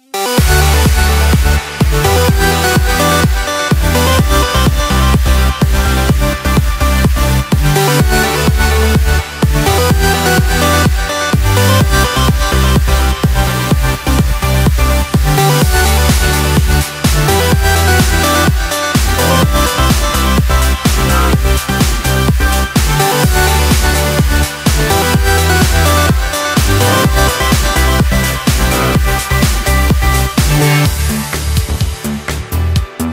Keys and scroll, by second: 0.0 Escape, 5.2 Return, 8.0 Escape, 8.2 Delete, 8.6 Return, 9.0 alt+7, 9.2 Escape, 12.3 Return, 14.8 Escape, 18.0 BackSpace, 21.8 Escape, 23.4 F1, 26.3 Return.